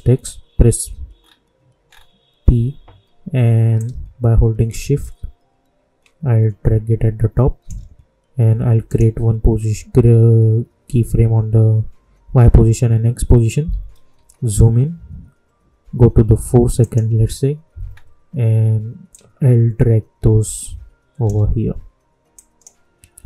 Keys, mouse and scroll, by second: 1.1 scroll up 1, 3.7-8.8 drag, 13.8 typing, 16.6 typing, 16.7 click, 17.8-19.1 scroll down 1, 19.1-22.3 drag.